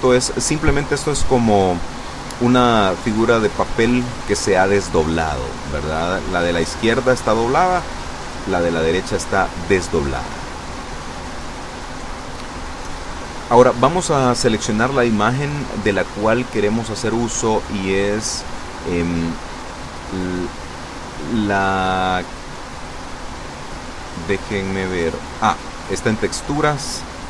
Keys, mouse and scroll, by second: 15.5 click, 16.5 click, 22.3 click, 25.8 click.